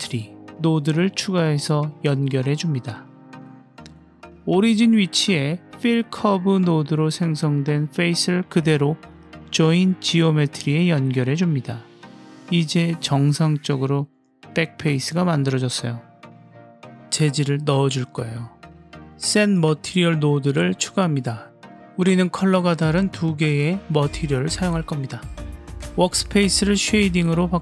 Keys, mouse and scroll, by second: 3.2 click, 4.0-4.5 drag, 4.7-5.5 middle drag, 6.2-9.2 middle drag, 10.0-10.8 drag, 11.3-13.0 middle drag, 13.6-14.6 drag, 14.9-16.6 middle drag, 17.1 click, 18.1 click, 18.4 g, 19.3 drag, 19.8 shift+a, 23.2 click, 23.8-24.9 drag, 25.2 click.